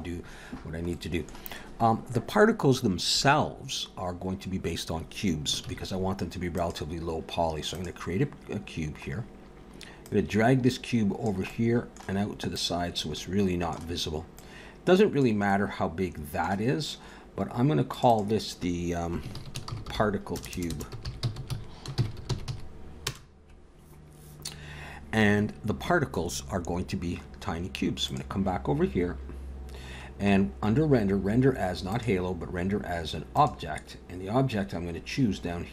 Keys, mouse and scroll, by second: 0.6 scroll down 1, 0.9 middle click, 3.9 scroll down 1, 5.7 shift+a, 9.1 scroll down 4, 10.0 click, 11.5 middle click, 12.6 click, 13.2 middle click, 14.4 click, 15.5 middle click, 17.9 click, 18.1 click, 20.5 BackSpace, 20.6 BackSpace, 27.1 scroll up 4, 28.1 click, 29.7 scroll down 1, 30.5 scroll down 1, 31.9 click, 35.5 scroll down 1.